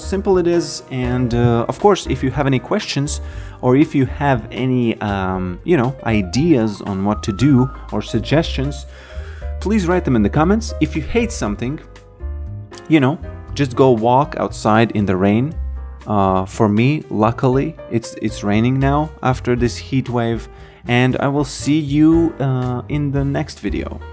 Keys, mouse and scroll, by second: 1.1 b, 2.4 alt+middle click, 3.7 alt+click, 4.6 alt+right click, 5.6 alt+middle click, 6.2 alt+right click.